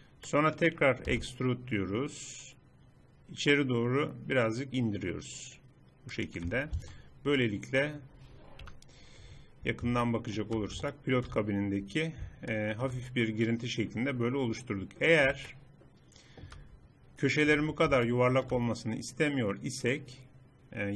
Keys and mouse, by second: 1.2 e, 6.8 Tab, 8.7 KP_Decimal, 17.6 Tab.